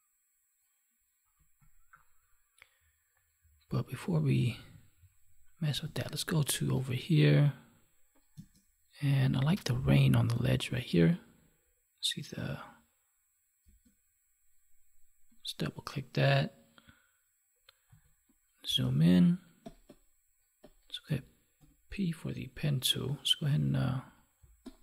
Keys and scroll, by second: 6.0 alt+Tab, 8.3 space, 13.6 space, 24.4 space.